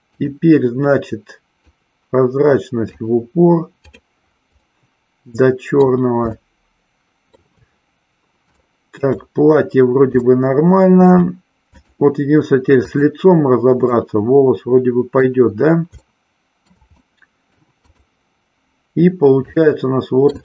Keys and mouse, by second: 0.1 click, 4.7-5.8 middle drag, 6.4-7.6 shift+middle drag, 8.6-9.2 shift+middle drag, 10.2-11.2 shift+middle drag, 11.8 click, 12.9 click, 13.9-15.3 middle drag, 16.1-16.8 shift+middle drag, 16.9-17.7 middle drag, 17.9 click, 19.6-20.4 shift+middle drag.